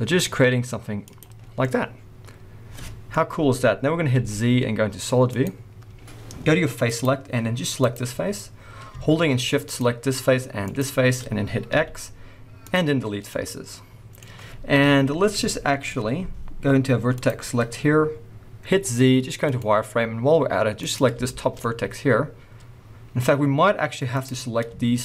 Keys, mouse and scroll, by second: 1.2 click, 1.4 scroll down 1, 1.5 middle click, 2.7 middle click, 4.1 z, 6.9 click, 7.8 click, 8.6 scroll up 1, 9.6 shift+click, 11.7 x, 12.9-13.2 scroll down 1, 13.2 middle click, 14.7 KP_1, 15.5 shift+middle click, 15.8 scroll up 1, 17.1 click, 17.8-18.6 scroll up 1, 18.6 z, 20.7 click, 21.2-22.4 shift+scroll up 2, 21.3 shift+middle click, 21.5 middle click, 24.1 click.